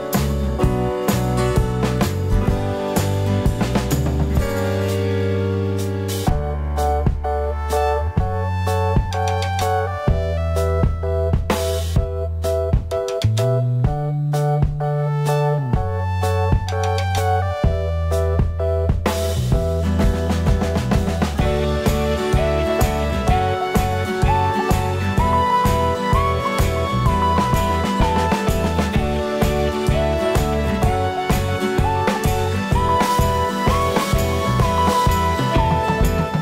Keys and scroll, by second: 31.2 ].